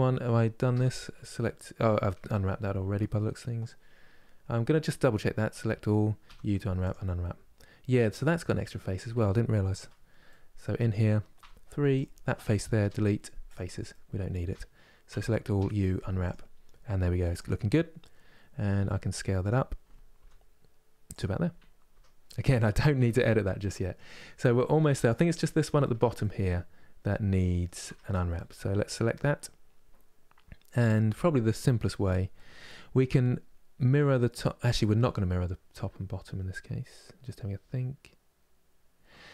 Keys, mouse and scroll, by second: 0.4 a, 5.0 a, 6.6 u, 8.0-9.5 middle drag, 9.5 KP_Divide, 9.9-11.7 middle drag, 11.7 click, 13.2 Delete, 13.6-14.8 middle drag, 14.8 a, 16.0 u, 17.0 click, 18.5 s, 19.9 g, 21.6 Tab, 22.0 middle click, 22.6 KP_Divide, 23.4-24.7 middle drag, 24.7 click, 25.1 scroll down 2, 25.9-27.5 middle drag, 27.5 Tab, 28.1-39.3 middle drag.